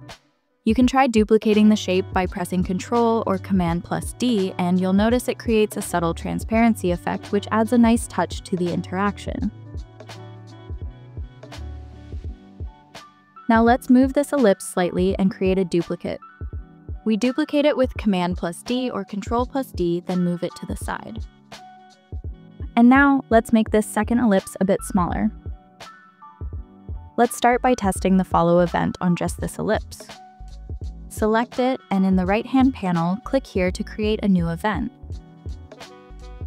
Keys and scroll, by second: 0.0 Return, 3.5 super+d, 12.1 super+z, 18.2 super+d.